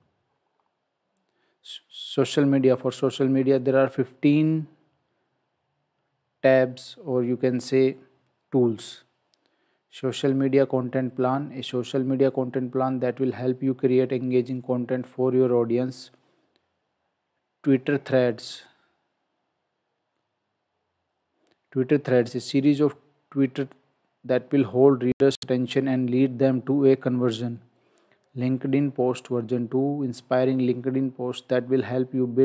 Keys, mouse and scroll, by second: 0.5-1.3 scroll down 1.